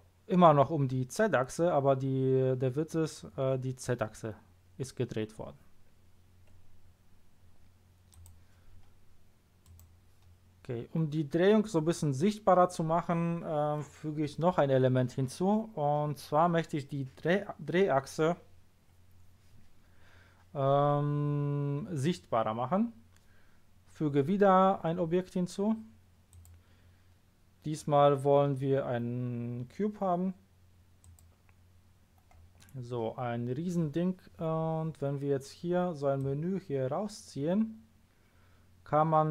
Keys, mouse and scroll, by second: 8.1 click, 9.6 click, 26.3 click, 31.0 click, 36.1 click.